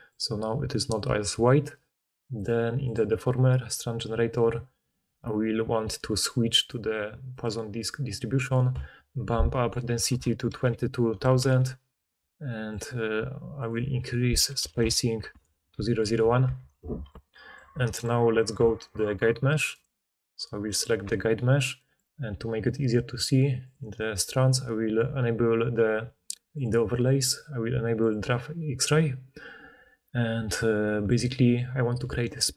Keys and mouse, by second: 10.0 2, 10.7 2, 16.5 alt+a, 18.8 click, 19.7 click, 19.7 middle click, 19.7 right click, 19.8 click, 19.9-26.6 right drag, 21.0 Tab, 26.6-27.1 middle drag, 27.1-32.0 right drag, 32.0 d, 32.3 d.